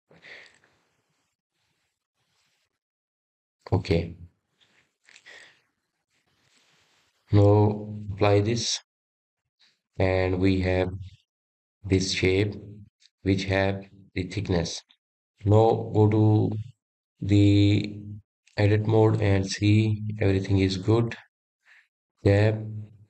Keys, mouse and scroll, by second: 2.3-3.5 drag, 3.5 scroll up 1, 3.6-5.8 middle drag, 5.8 Tab, 6.5 middle click, 7.4 Tab, 8.0-9.3 middle drag, 9.3-10.6 drag, 10.6-11.0 scroll down 3, 11.0-11.7 middle drag, 11.7 click, 12.2-12.5 scroll up 3, 12.5-13.0 scroll down 2, 13.0-18.3 middle drag, 18.3-19.7 drag, 19.7-22.9 middle drag.